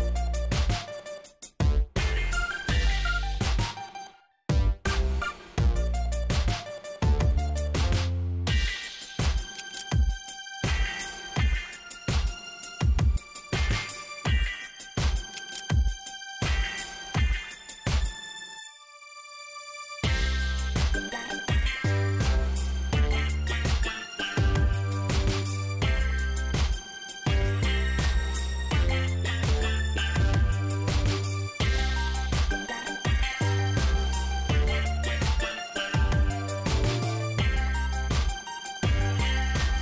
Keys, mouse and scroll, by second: 1.1 scroll up 1, 1.4 shift+right click, 3.7 click, 5.8 KP_1, 6.6 ,, 6.7 KP_5, 8.5 click, 10.5 click, 10.7 space, 14.5 click, 15.6 click, 18.3 click, 20.2 7, 22.0 click, 22.8 middle click, 23.5 scroll down 1, 24.3 shift+right click, 26.6 shift+right click, 28.6 shift+right click, 34.1 click, 35.4 scroll down 2, 36.1 shift+right click.